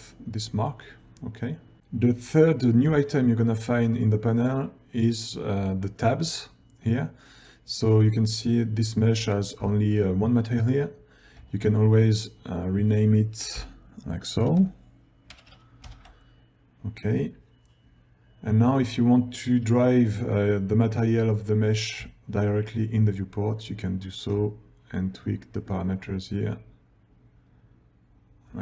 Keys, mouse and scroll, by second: 3.4 ctrl+scroll down 1, 9.8 ctrl+scroll down 1, 11.6-20.5 ctrl+drag, 15.5 shift+a, 22.2 ctrl+scroll down 1.